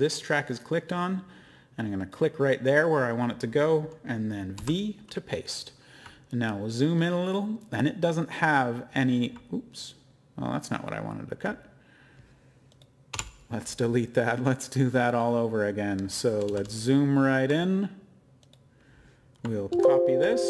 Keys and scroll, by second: 4.5 v, 13.1 BackSpace, 16.2-17.3 typing, 19.7 ctrl+c, 19.7-20.0 typing.